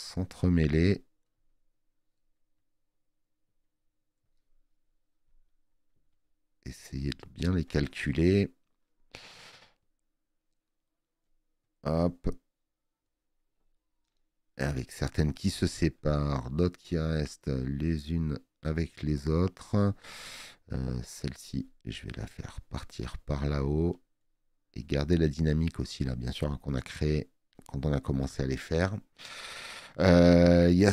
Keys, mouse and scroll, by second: 8.0 space, 8.1 click.